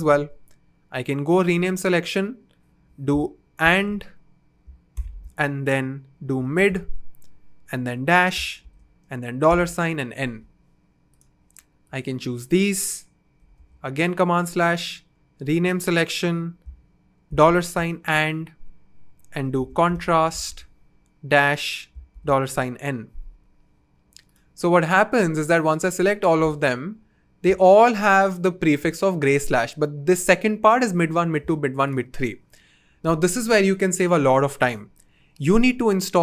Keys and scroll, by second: 0.0 super+/, 1.3 Return, 3.6 shift+4, 4.9 shift+7, 6.0-9.4 typing, 13.5 super+/, 14.8 Return, 17.2 shift+4, 17.9 shift+7, 19.3-22.4 typing, 35.7 super+/.